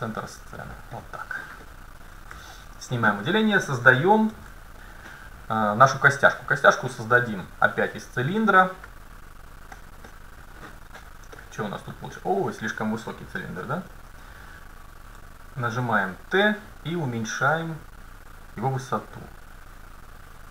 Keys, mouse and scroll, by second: 1.7-2.3 scroll up 1, 2.4 a, 4.3 shift+a, 9.8-12.0 middle drag, 14.0 n, 15.1 n, 15.8 t, 19.3-20.5 drag.